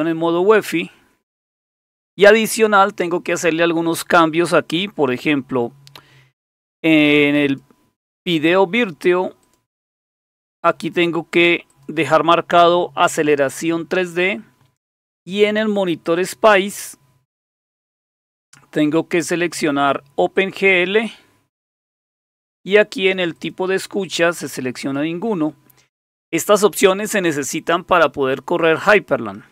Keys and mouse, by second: 7.4 click, 9.4 click, 11.7 click, 16.1 click, 17.6 click, 20.3 click, 23.3 click, 24.8 click.